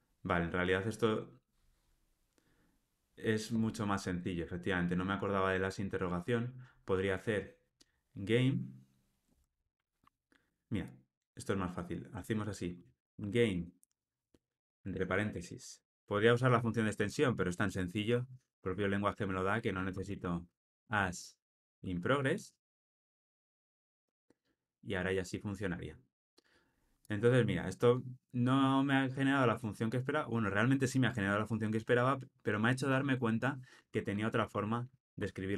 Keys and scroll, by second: 23.1 Return.